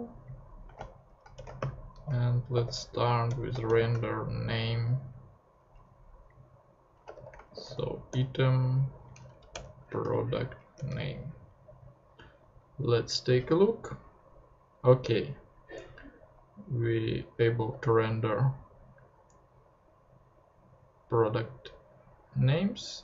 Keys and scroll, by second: 0.7 f, 1.3 shift+BackSpace, 1.6 shift+,, 2.5 shift+t, 3.3 shift+Return, 3.6 shift+., 6.9-8.6 typing, 9.3 Down, 9.5 Return, 10.0 •, 10.7 Return, 12.2 super+Tab.